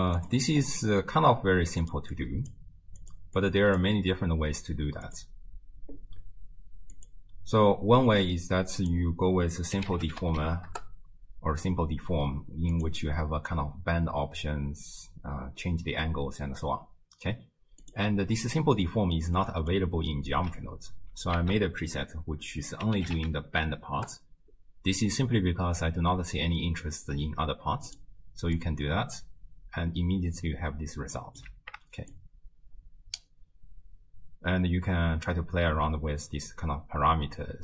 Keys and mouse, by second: 0.2 click, 1.8 click, 2.2 click, 3.0 click, 3.5 click, 5.1 click, 7.0 click, 9.0-10.8 drag, 12.8 click, 17.8 click, 19.4 click, 21.4 ctrl+a, 28.6-29.2 drag, 31.2 middle click, 32.1-37.6 shift+drag.